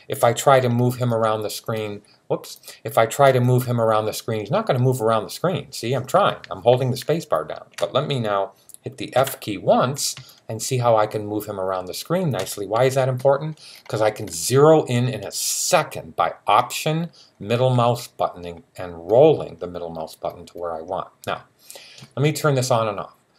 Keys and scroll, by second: 9.0 f.